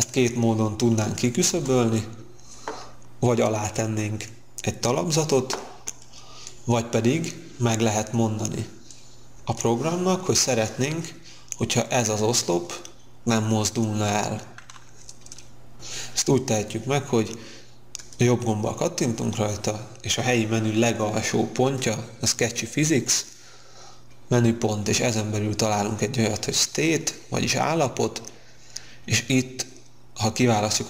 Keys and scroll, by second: 1.4 space.